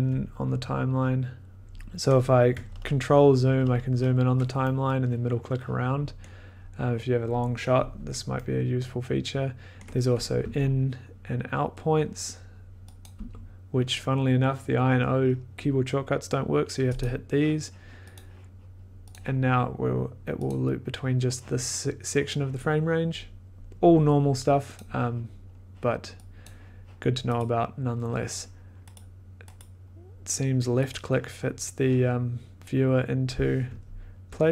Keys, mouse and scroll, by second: 0.7 scroll, 0.9 ctrl+click, 1.6-2.0 ctrl+scroll, 2.6-4.3 ctrl+scroll, 6.1-6.5 scroll, 9.7 scroll, 10.3 scroll, 10.4 i, 13.0 click, 13.1 i, 17.0 click, 18.1 click, 19.1 click, 20.4 click, 24.7 click, 26.4 click, 27.4 right click, 28.9 right click, 29.5 right click, 30.9 right click, 33.7 ctrl+scroll.